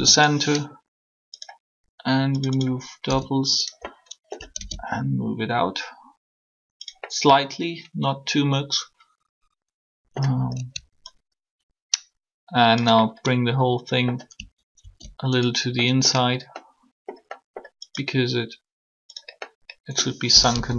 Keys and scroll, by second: 3.0 s, 20.4 1.